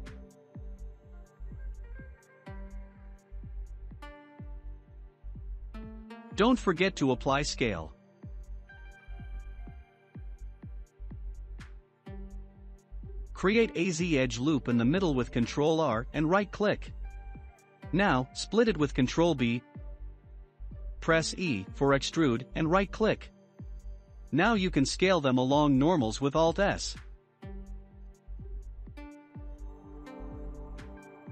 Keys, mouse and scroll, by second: 0.4 click, 1.7 s, 3.4-3.8 middle drag, 3.8-4.5 scroll up 4, 4.5-5.2 scroll up 5, 4.5-4.9 shift+middle drag, 5.2-5.9 middle drag, 7.4-8.6 middle drag, 8.6-9.5 scroll up 2, 9.5-11.1 middle drag, 11.1 scroll up 1, 11.7 Tab, 13.1 ctrl+r, 20.3 e, 22.3 alt+s, 28.2 middle click, 28.6-29.6 scroll up 1, 29.6-30.0 scroll up 2, 30.0 click, 30.5 middle click, 31.1-31.3 scroll up 2.